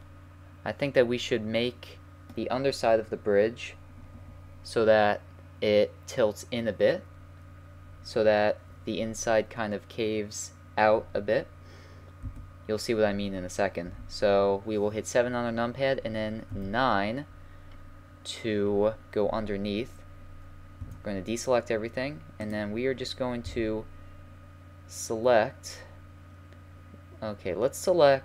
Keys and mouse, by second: 0.5 middle click, 0.7-2.0 middle drag, 12.2 KP_1, 13.9 KP_7, 16.5 KP_9, 20.8 a, 22.5-24.4 drag, 23.5 c.